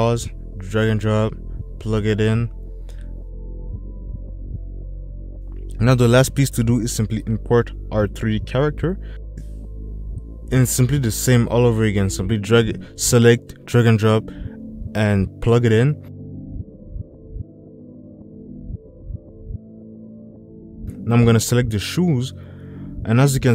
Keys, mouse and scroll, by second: 1.8 click, 5.3 click, 8.2 click.